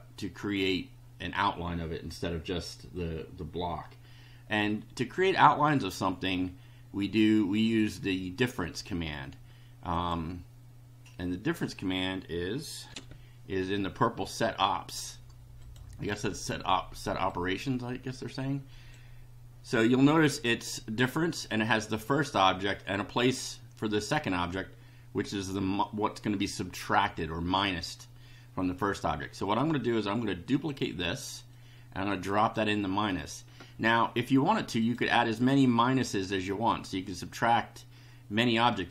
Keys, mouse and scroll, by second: 7.6 click, 9.9 click, 12.9 ctrl+r, 15.6 click, 17.3-19.1 drag, 29.4 right click, 30.6 click, 31.6-32.7 drag, 34.8 click.